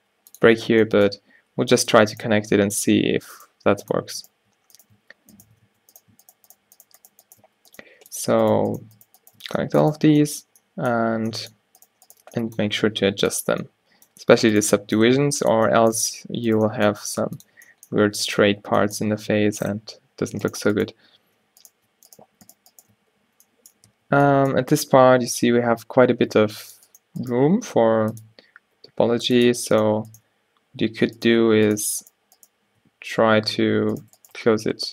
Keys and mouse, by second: 0.1 g, 1.0 click, 2.6-6.1 drag, 2.9 alt+w, 3.6 g, 5.8 alt+w, 6.1 right click, 6.9-8.0 drag, 7.5 f, 8.0 g, 8.8 click, 9.5 g, 10.1 click, 10.1 f, 11.3 a, 13.0 g, 15.2 g, 17.1 g, 17.7 Tab, 18.2 Tab, 18.6 Tab, 19.1 Tab, 21.3 alt+w, 23.0 f, 23.9 a, 26.3 ctrl+r, 27.5-32.1 drag, 27.5 g, 28.9 g, 32.2 click, 32.4-33.8 drag, 33.8 f, 34.4 f, 34.7 Tab.